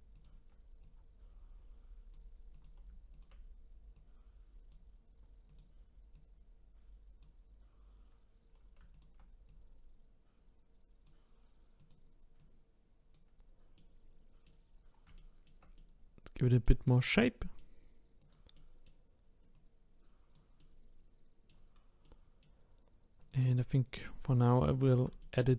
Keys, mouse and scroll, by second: 0.1 shift+click, 0.8 click, 2.5 click, 3.1 shift+click, 3.9 click, 5.5 click, 6.1 click, 8.9 shift+click, 9.5 click, 11.8 click, 12.4 click, 13.8 middle click, 14.7-15.1 scroll down 2, 15.1-18.2 shift+middle drag, 18.2 click, 18.5 middle click, 19.5 click, 20.6-23.2 middle drag, 23.2 click, 24.2-25.2 scroll up 4, 25.2 shift+middle click.